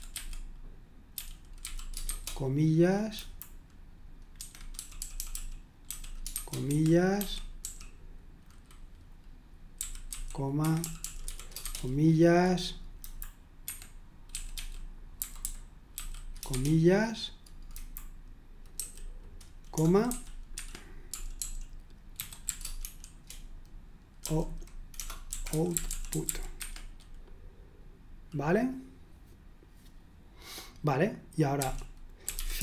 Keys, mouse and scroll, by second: 0.0-2.6 typing, 3.1 Delete, 4.3 Escape, 4.7-8.1 typing, 6.6 Escape, 9.5-12.1 typing, 13.0 Delete, 13.6 Escape, 14.3-16.5 typing, 17.7 Delete, 18.7 typing, 20.0 typing, 20.5 Escape, 21.1-23.3 typing, 25.0-26.8 typing, 31.5-32.6 typing.